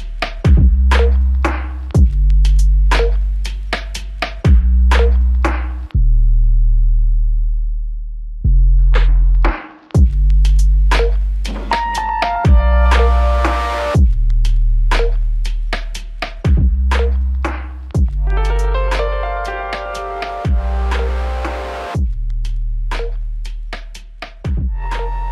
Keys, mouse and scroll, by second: 18.8 space.